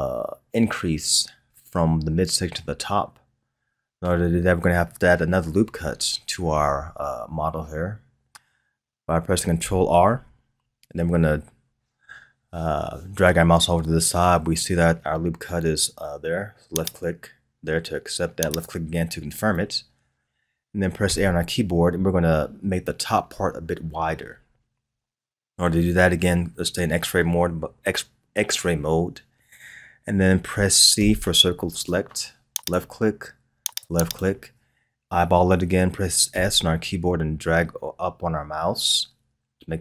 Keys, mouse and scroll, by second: 10.0 ctrl+r, 21.0 a, 30.9 c, 36.3 s.